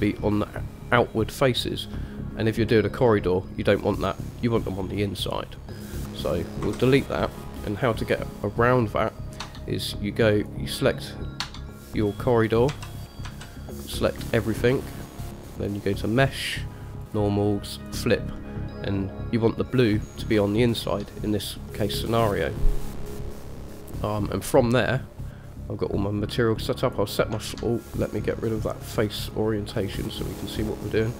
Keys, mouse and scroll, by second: 1.6-2.6 middle drag, 3.3-3.8 middle drag, 4.5-5.3 middle drag, 6.9 Delete, 7.3-8.3 middle drag, 9.6 Tab, 10.5 click, 11.6 Tab, 12.9 a, 13.4 a, 15.7-18.1 drag, 18.6 middle click, 20.7 shift+middle click, 23.2 middle click, 27.0 click, 28.7-30.8 drag.